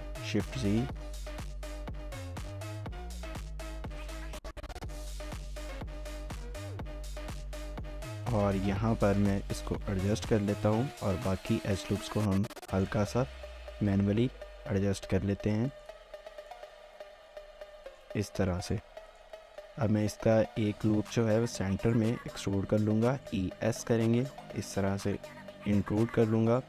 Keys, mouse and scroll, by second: 2.1-2.7 scroll down 1, 2.7-3.5 scroll up 1, 3.5-4.3 scroll down 1, 4.3-5.8 scroll up 1, 5.8-6.8 scroll down 1, 6.8-7.5 scroll up 1, 7.3-8.0 typing, 10.0 alt+click, 10.4 shift+middle click, 11.9 typing, 13.1 shift+click, 13.7 typing, 17.1 s, 18.5 shift+middle click, 19.1 alt+click, 19.4 shift+middle click, 19.8-21.9 scroll up 1, 22.1 typing, 25.0 typing, 25.2 shift+middle click, 25.6 scroll down 1, 25.8 shift+middle click.